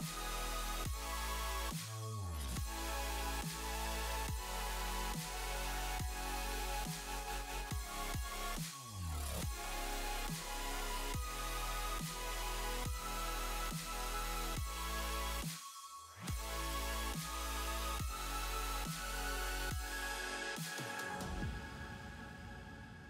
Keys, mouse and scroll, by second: 2.6 space, 2.8 middle click, 4.0 middle click, 5.9 click, 6.1 middle click, 7.8 shift+middle click, 8.8 click, 9.0 middle click, 9.7 shift+middle click, 9.9-10.3 scroll up 3, 10.3 shift+middle click, 10.7 click, 12.1 click, 12.5 click, 13.1 click, 13.5 click, 13.7 middle click, 14.3 scroll down 3, 14.5 shift+middle click, 14.8 space, 18.4 space, 18.6 click, 19.0 click, 19.4-20.5 scroll down 6, 20.1 click, 20.7 click, 22.0 space, 22.2 click.